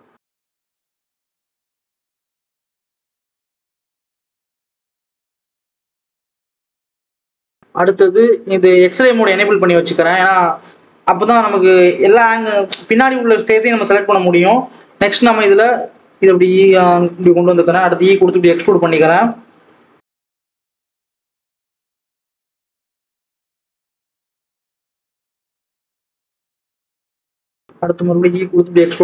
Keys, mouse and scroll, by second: 0.9 click, 1.8 e, 3.4-3.7 scroll down 1, 3.7 click, 4.9 click, 5.1-6.4 scroll up 2, 6.4-7.0 scroll up 1, 7.0 Tab, 7.6-9.2 drag, 9.2 Tab, 10.0 click, 10.4-13.3 scroll down 1, 15.6 g, 17.5 e, 21.7 click, 22.4 1, 23.2 click, 25.8 click, 26.4 click, 27.8 e.